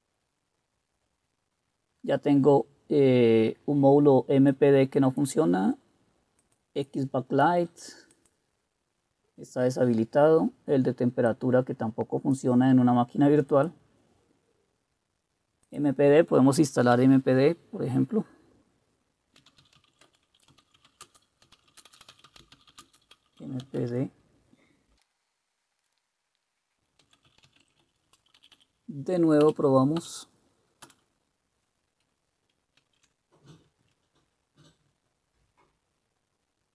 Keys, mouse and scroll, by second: 19.4-25.5 typing, 27.0-28.2 typing, 28.5 Up, 28.7 Up, 29.6 Up, 30.1 Up, 30.9 Return, 32.9 ctrl+c.